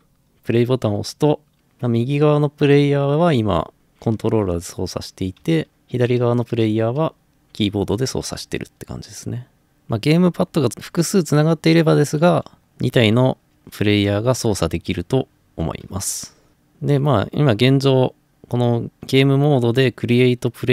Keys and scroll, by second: 1.6 typing, 5.2-8.3 typing, 12.3 a, 13.2 d, 14.7 typing, 16.3-17.0 typing.